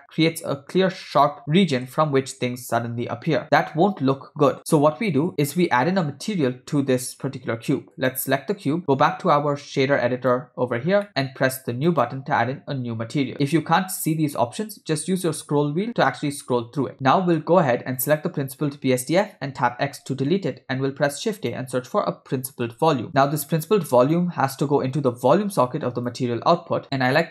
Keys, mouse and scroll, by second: 2.1 space, 4.6 space, 8.0-8.4 drag, 9.4-10.4 drag, 11.1 middle click, 11.9 click, 15.2 scroll down 1, 15.3 scroll down 2, 15.9-16.9 scroll down 4, 16.9 ctrl+middle click, 16.9 scroll down 2, 18.0 click, 20.1 x, 21.0 shift+a, 25.1 click, 26.3 click, 26.8 click.